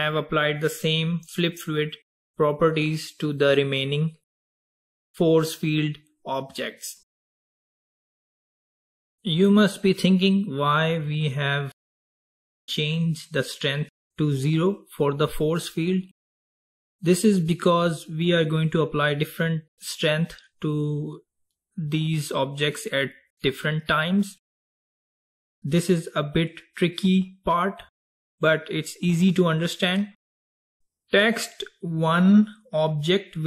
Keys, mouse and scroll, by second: 0.2 click, 1.3 click, 9.1 click, 30.3 click.